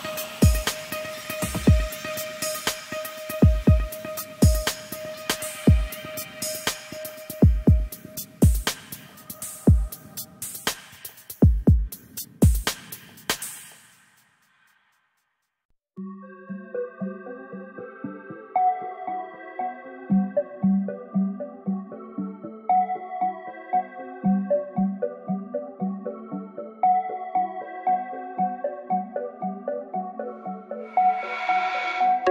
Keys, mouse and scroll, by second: 22.9-23.5 scroll down 2, 23.5 click, 23.7-24.4 scroll down 2, 24.4 y, 24.7 g, 25.4-25.9 scroll down 2, 25.9-26.4 scroll up 7, 26.4 shift+middle click, 27.3 k.